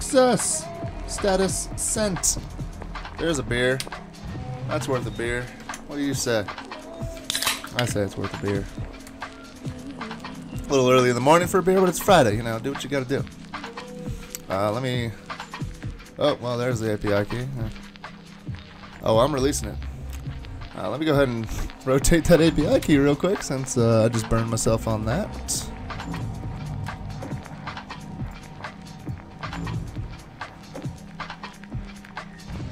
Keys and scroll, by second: 3.8 alt+super+*, 8.6 super+Tab, 9.1 super+Tab, 26.9 alt+super+0.